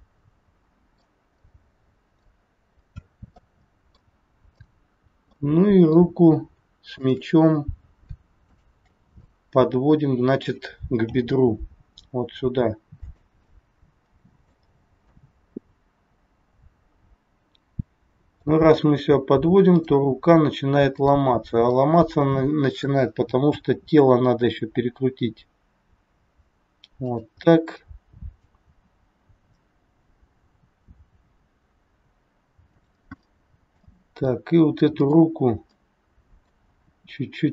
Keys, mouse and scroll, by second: 2.8-3.6 scroll up 3, 3.4 middle click, 4.4 click, 5.3 middle click, 6.3 scroll up 1, 6.9 shift+click, 9.2 middle click, 11.0 g, 13.4 middle click, 14.8-15.3 scroll down 2, 15.3 middle click, 19.7 click, 20.9 click, 21.7 middle click, 24.4 r, 27.5 middle click, 28.7 r, 33.2 middle click, 34.9 click, 35.7 middle click, 36.8 r.